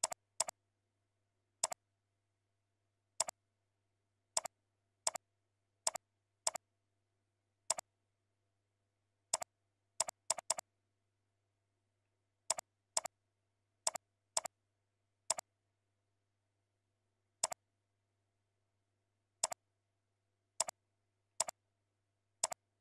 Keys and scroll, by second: 0.5 ctrl+a, 1.1 ctrl+v, 5.7 ctrl+c, 6.6 ctrl+a, 7.0 ctrl+v, 11.2 ctrl+shift+,, 13.7 ctrl+b, 18.2 ctrl+shift+., 21.8 ctrl+a.